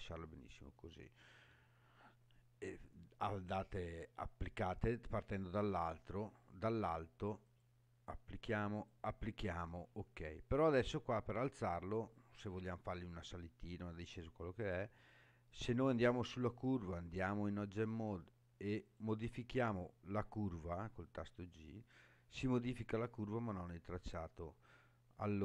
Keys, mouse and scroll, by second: 7.4 click, 8.7 click, 15.0 click, 16.9 Tab, 18.8 click, 20.9 g, 23.4 right click.